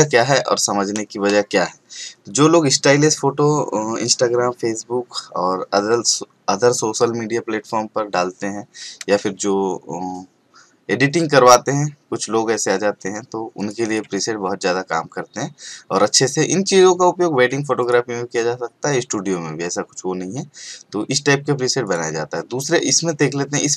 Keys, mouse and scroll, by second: 13.6 click, 17.8 click, 21.8 click.